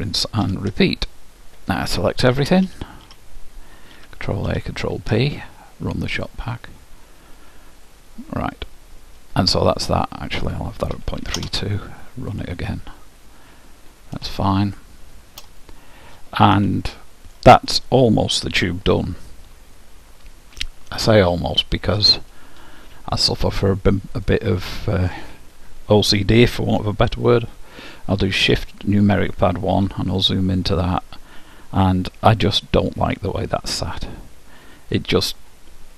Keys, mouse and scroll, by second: 1.5-1.8 scroll up 1, 1.8-2.8 scroll down 1, 2.8-3.4 scroll down 1, 2.8 a, 3.2 a, 3.4 scroll up 1, 3.4 middle click, 4.1 ctrl+a, 4.6 ctrl+p, 6.2-8.0 drag, 8.4-10.1 middle drag, 10.4-14.4 drag, 14.6-16.4 middle drag, 16.9-18.6 middle drag, 21.3-23.1 drag, 24.2-25.9 drag, 29.9 KP_Decimal, 32.5-34.4 middle drag.